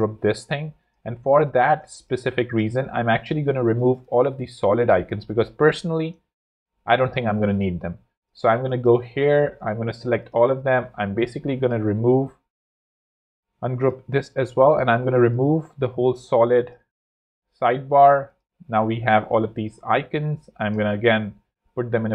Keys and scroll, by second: 1.3 z, 2.1 shift+super+z, 2.9 shift+super+x, 3.8 super+x, 6.2 super+3, 9.4 shift+super+a, 9.9 shift+super+g, 13.5 shift+super+g, 16.9 super+x, 21.9 alt+super+g.